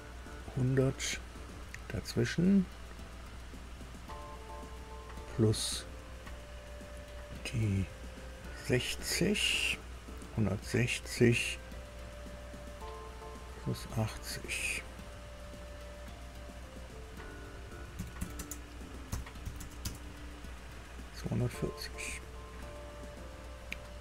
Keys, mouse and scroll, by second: 16.9 click, 17.9 KP_1, 18.1 KP_6, 18.3 KP_0, 19.0 KP_Add, 19.4 KP_8, 19.5 KP_0, 19.8 KP_Enter, 21.5 click.